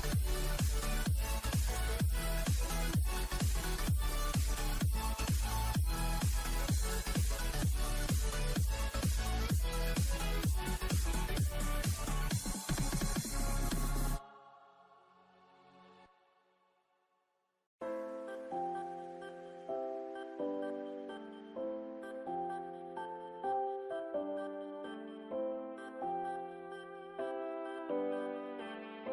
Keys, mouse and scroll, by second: 1.6-6.9 drag, 6.9 scroll up 1, 7.2 click, 14.1 click, 15.4 click, 18.3-22.4 drag, 23.0 Tab, 24.4-26.0 drag, 26.4 shift+Left, 26.4 click, 26.5 shift+Left, 26.5 click, 26.7 shift+Left, 26.7 click, 26.8 shift+Left, 27.0 shift+Left, 27.1 shift+Left, 27.1 click, 27.2 shift+Left, 27.2 click, 27.4 shift+Left, 27.4 click, 28.6-29.0 scroll down 4.